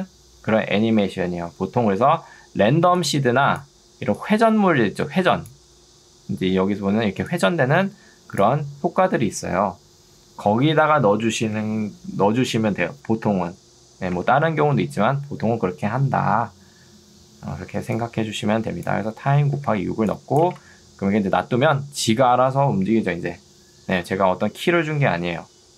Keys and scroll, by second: 14.2 Escape, 17.6 ctrl+2, 19.6 Escape, 20.6 space, 24.0 space.